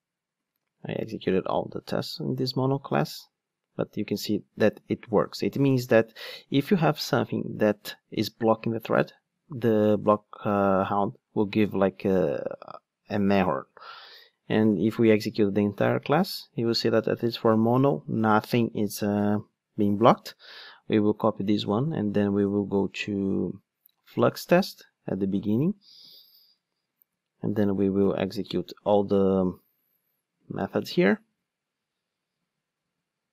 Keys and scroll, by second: 0.8 ctrl+shift+d, 21.5 super+c, 26.1 super+v, 28.1 super+F8.